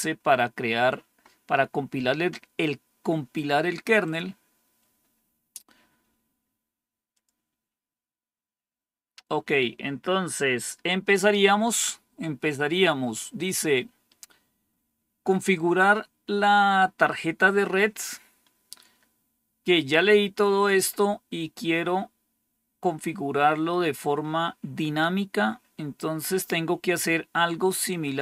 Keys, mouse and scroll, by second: 3.9 click, 7.0 click, 21.2 scroll down 1, 21.9-22.7 scroll down 1, 22.7-24.1 scroll down 1, 24.1 scroll down 1, 24.6-26.1 scroll down 2, 26.1-28.2 scroll down 1.